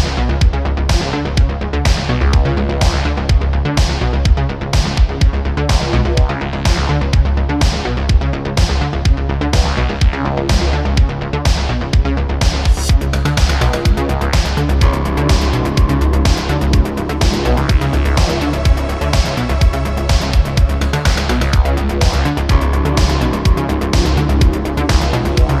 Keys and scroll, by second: 4.7 super+s, 6.0 shift+d, 6.2 y, 7.4 9, 7.4 0, 7.6 Return, 8.4 1, 8.6 8, 8.7 Return, 10.5 `, 16.5 2, 16.7 Tab, 16.9 2, 18.6 alt+z, 20.5 e, 21.3 y, 22.0 Tab.